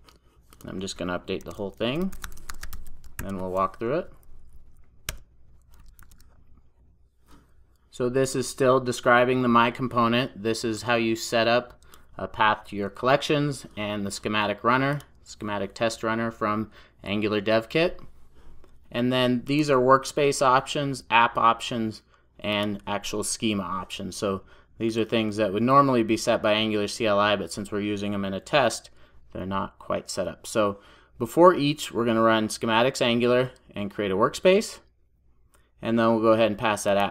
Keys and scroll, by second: 1.5 super+a, 3.5 super+j, 5.1 Return, 6.0 super+s.